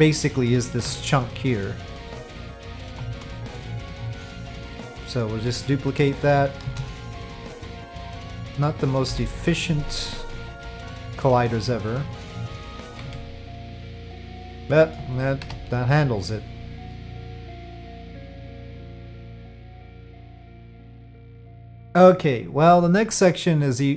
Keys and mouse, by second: 0.5 middle click, 0.8 Tab, 1.6 middle click, 2.9 3, 3.4 alt+click, 4.0-5.2 middle drag, 6.6 shift+d, 9.1 p, 12.8 f, 13.1 Tab, 13.1 f, 13.9-14.3 middle drag, 14.7 middle drag, 15.4 KP_Divide, 16.9-17.2 middle drag.